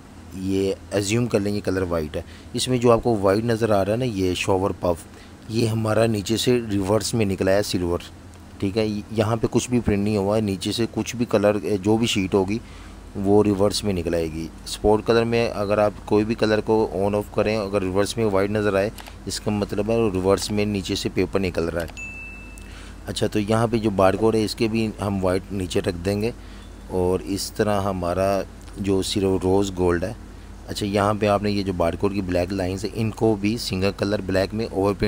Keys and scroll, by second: 0.0-0.5 typing, 5.6 super+-, 14.0 super+-, 15.7 v, 18.9 z, 19.1 z, 20.5 v.